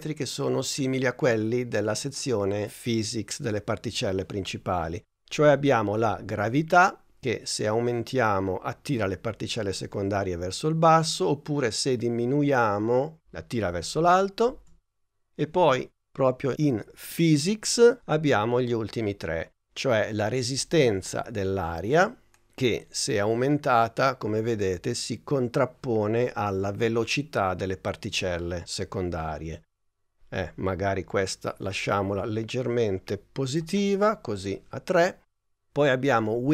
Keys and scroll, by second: 14.5 super+z.